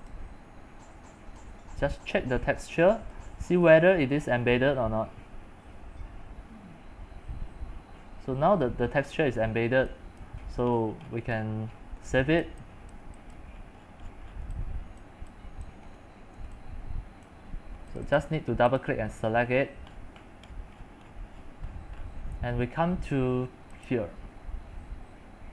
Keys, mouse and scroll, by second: 2.1 click, 2.7-4.0 drag, 4.0-9.3 middle drag, 4.0-4.3 scroll, 9.8 c, 10.3 click, 10.4 c, 10.8 scroll, 11.0 scroll, 11.1 scroll, 11.3 scroll, 11.3 scroll, 11.4 scroll, 11.7 scroll, 11.8 scroll, 12.0 middle click, 12.1 x, 12.4 click, 12.6 c, 13.2 c, 13.7 middle click, 13.7 scroll, 14.0-14.5 scroll up 24, 14.5-16.9 typing, 16.0 shift+middle click, 17.3-19.7 drag, 19.7 scroll, 20.1-22.0 middle drag, 20.1-21.9 scroll, 22.0-23.9 scroll up 18, 23.9-25.5 drag.